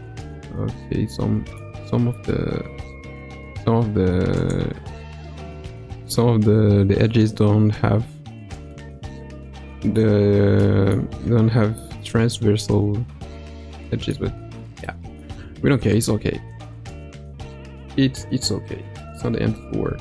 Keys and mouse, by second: 4.3 click, 8.7-10.0 middle drag, 10.6 middle click, 13.8 middle click, 14.2 Tab, 14.9 middle click, 15.3 Tab, 16.5 click, 18.4 middle click, 19.8 Tab.